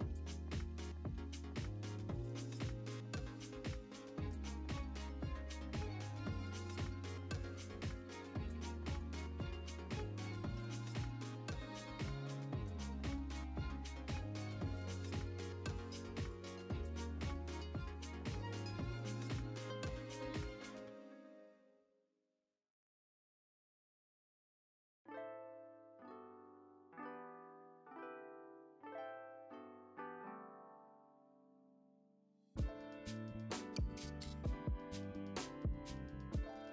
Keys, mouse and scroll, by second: 0.3 KP_7, 0.6 scroll down 1, 0.9 alt+a, 1.7 shift+a, 1.9 g, 2.1 click, 2.2 Tab, 14.8 click, 15.1-17.5 typing, 15.3 click, 15.5 scroll down 1, 16.1 click, 16.3 scroll up 1, 16.5 Tab, 17.0 shift+click, 17.7 click, 18.0 scroll up 1, 18.3 scroll down 1, 19.1 click, 20.7 scroll down 1, 20.9 e, 21.1 click, 24.3 click, 25.9 e, 28.7 click, 29.3 shift+click, 29.5 f, 30.1 Tab, 30.5 click, 31.0 x, 31.2-31.6 scroll down 2, 31.3 z, 31.7 scroll up 2, 32.0 Tab, 32.3 click, 32.7 f, 33.0 2, 33.1 click, 33.4 1, 33.5 click, 34.1 x, 34.6 scroll down 1, 34.7 Tab, 35.1-36.7 typing, 35.7 Tab, 36.4 Tab.